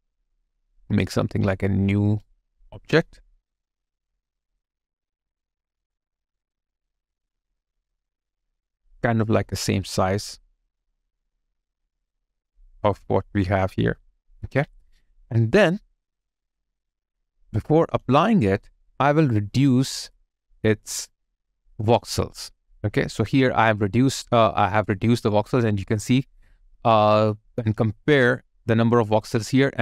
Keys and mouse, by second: 12.7 alt+click, 15.1 alt+click, 15.8 alt+right click, 17.6 alt+right click, 17.7 alt+click, 18.2 alt+middle click, 27.9 alt+middle click.